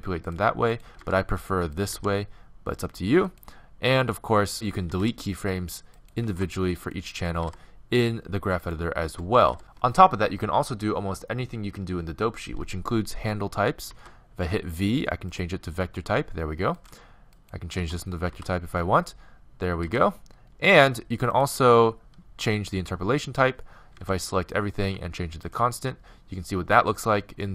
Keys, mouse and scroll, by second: 0.7-2.4 right drag, 1.0 r, 1.9 s, 4.6-9.6 right drag, 4.9 x, 6.2 x, 7.4 x, 13.9 v, 16.8-19.3 right drag, 17.8 v, 19.9 g, 22.8 t, 24.0 a, 24.2 a, 24.9 t.